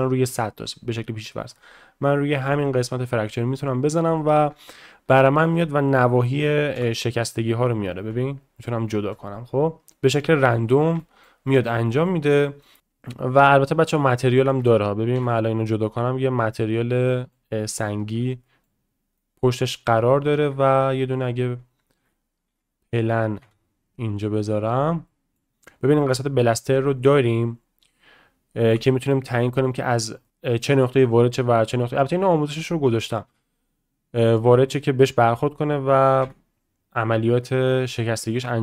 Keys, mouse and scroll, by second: 1.6-2.8 drag, 5.1-5.4 shift+middle drag, 9.1-9.9 middle drag, 10.2-10.5 shift+middle drag, 11.0 shift+middle drag, 11.5 middle click, 11.9 shift+middle click, 12.6 middle click, 13.4 click, 14.2 shift+middle drag, 17.0 middle drag, 18.0 ctrl+z, 18.4 middle drag, 19.2 middle click, 19.6 shift+drag, 20.5 shift+a, 22.0 ctrl+z, 22.5 shift+a, 23.4 s, 25.1 middle click, 25.7 click, 27.0 click, 30.2 middle click.